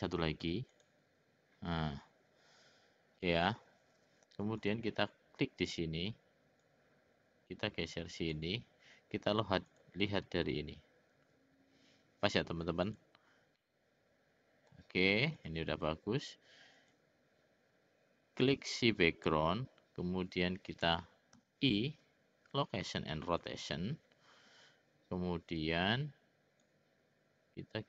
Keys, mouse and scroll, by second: 0.7 click, 4.6 click, 6.6-8.5 drag, 9.7 click, 12.9 click, 13.6-14.8 middle drag, 15.4 click, 16.8 click, 18.5 click, 26.9-27.8 drag.